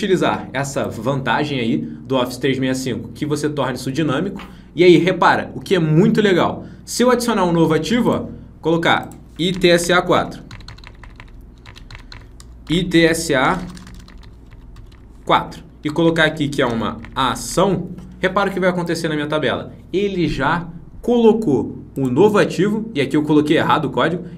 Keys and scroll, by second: 11.8 ctrl+Down.